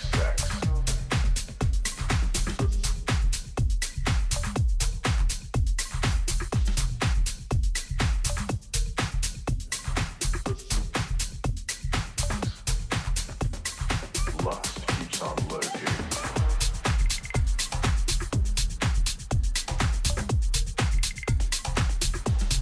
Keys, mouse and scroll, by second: 1.4-3.3 drag, 3.8 a, 5.2 a, 6.5 a, 7.0 a, 7.3 a, 7.6-10.1 middle drag, 10.4 z, 11.0-12.5 middle drag, 16.4 KP_3, 17.0 z, 17.7-19.9 middle drag, 18.6 a, 19.1 a.